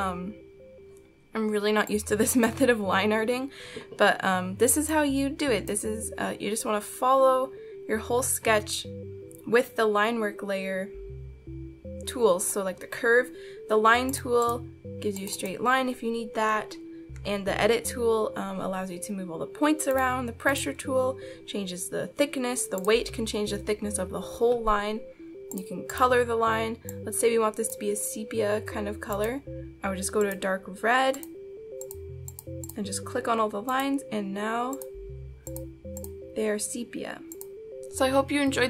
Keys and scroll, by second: 16.8 ctrl+z.